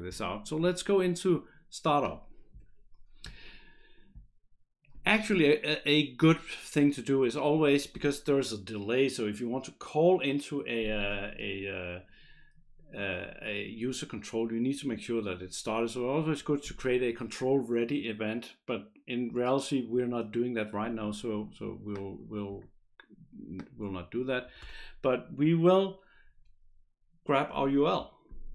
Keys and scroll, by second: 24.5 Return, 24.6 Return.